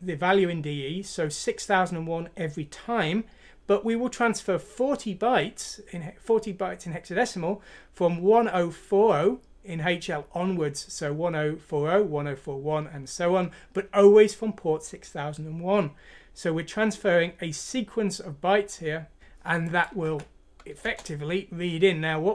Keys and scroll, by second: 20.1 F6, 20.9 Return.